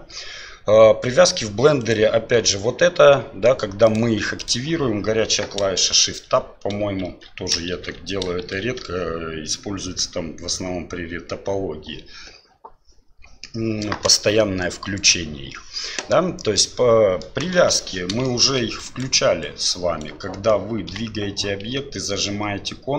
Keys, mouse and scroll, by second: 1.8 right click, 3.8 click, 4.4 click, 6.0 shift+Tab, 7.0 shift+Tab, 7.7 shift+Tab, 8.4 shift+Tab, 16.5-17.2 middle drag, 17.5 KP_7, 18.2 shift+middle drag, 18.8 right click, 19.4 right click, 20.9 g.